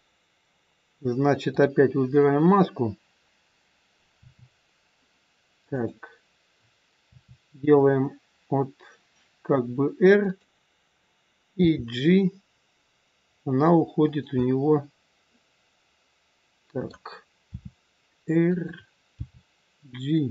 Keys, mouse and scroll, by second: 1.5 click, 2.7 click, 4.1 r, 5.7 click, 7.1 r, 11.6 g, 14.3 middle click, 17.5 r, 19.2 g.